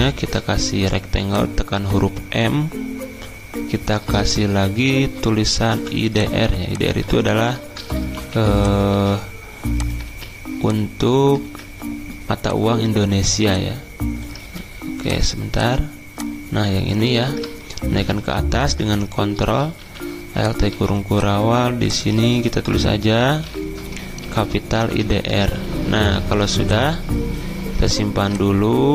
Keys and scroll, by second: 0.0-0.7 typing, 5.8 v, 8.1 t, 8.9 ctrl+a, 10.0 ctrl+z, 11.4 ctrl+z, 20.7 shift+a, 22.5-25.5 typing, 25.5 Escape.